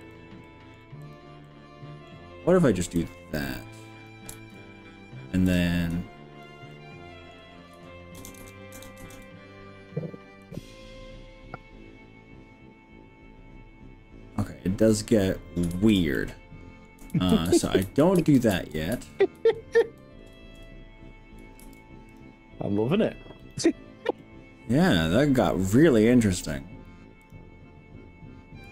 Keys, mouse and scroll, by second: 0.5 middle click, 1.0 click, 1.4 middle click, 3.0 click, 4.4 ctrl+z, 6.0 click, 6.7 middle click, 8.2 ctrl+KP_Add, 8.4 ctrl+KP_Add, 8.8 ctrl+KP_Add, 9.0 ctrl+KP_Add, 10.4 click, 15.8 ctrl+z, 16.2 middle click, 17.2 ctrl+z, 17.5 ctrl+z, 17.8 ctrl+z, 18.2 ctrl+z, 18.6 ctrl+z, 19.0 ctrl+z, 19.4 ctrl+z, 19.8 ctrl+z, 20.4 ctrl+shift+z, 21.6 ctrl+r, 23.4 right click, 24.2-25.9 middle drag, 27.2 click.